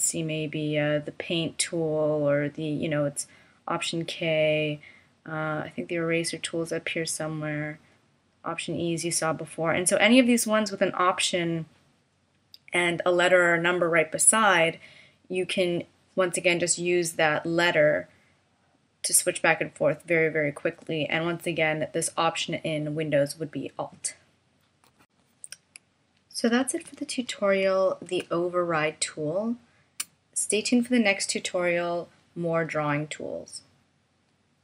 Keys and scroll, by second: 0.6 F6, 0.6 p, 4.2 super+a, 5.4 super+a, 5.4 F6, 5.4 p, 5.5 super+c, 9.3 F6, 9.3 p, 9.4 super+a, 26.8 super+-, 28.3 space.